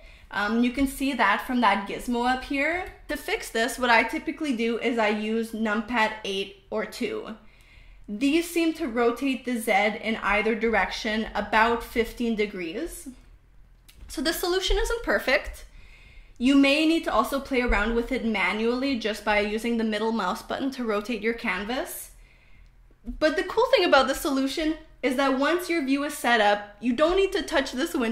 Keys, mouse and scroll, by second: 0.0-2.3 typing, 4.3-12.0 typing, 13.0 KP_2, 13.6 KP_8, 15.5-18.0 middle drag, 18.6 KP_8, 19.0 KP_2, 20.7-22.3 middle drag, 24.7-26.1 drag.